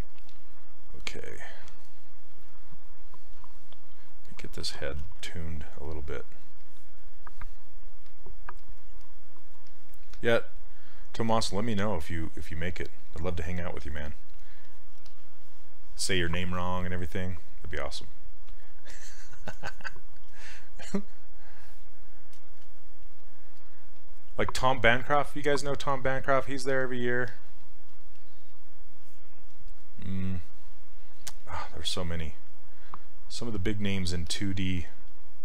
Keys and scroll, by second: 5.0 s.